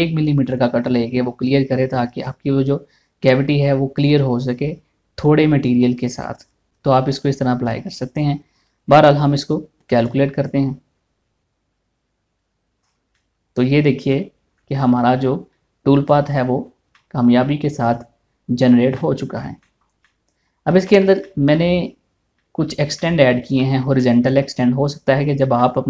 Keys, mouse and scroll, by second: 10.6 click, 13.4 scroll down 1, 13.7-15.3 middle drag, 15.7 scroll up 1, 16.1-21.4 middle drag, 22.4 scroll up 1, 23.0 middle click, 25.5 scroll up 1.